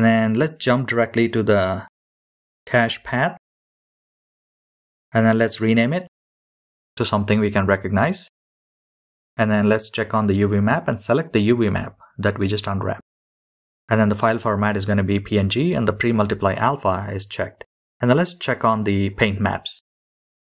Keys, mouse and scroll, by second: 9.3-12.1 drag.